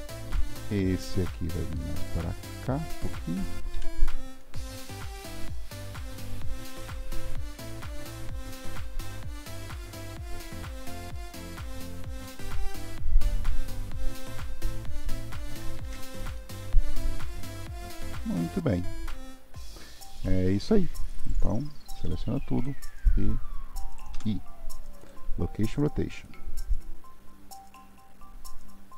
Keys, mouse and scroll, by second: 0.3 scroll up 1, 0.5-2.6 middle drag, 2.6 click, 3.8 KP_3, 4.9 r, 6.7 click, 7.3-8.7 middle drag, 8.7 r, 9.8-12.8 middle drag, 12.8-13.1 drag, 13.1 r, 15.8 alt+z, 16.4-19.4 middle drag, 22.1 click, 26.2-28.9 drag.